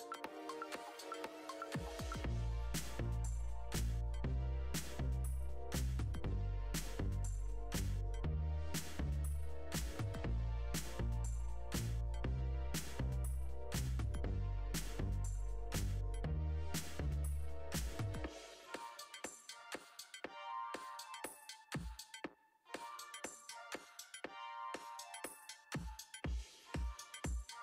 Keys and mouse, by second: 5.1 click, 7.3 click, 7.9 r, 8.2 y, 15.7 shift+drag, 18.7 click, 19.8 middle click, 20.2-20.6 middle drag.